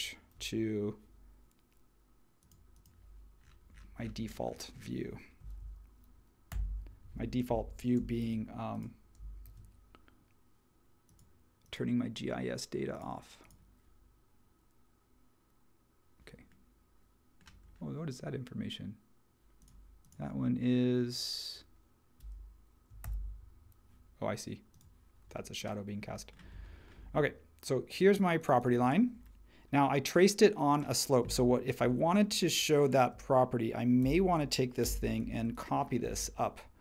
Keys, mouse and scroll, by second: 6.5 super+[, 8.2 shift+t, 9.4 shift+t, 23.0 super+e, 34.0 super+g, 34.8 m.